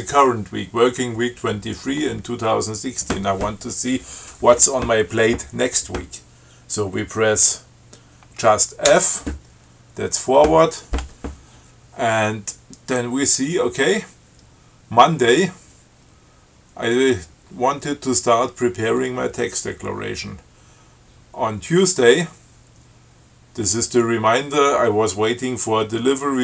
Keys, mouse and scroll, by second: 9.1 f.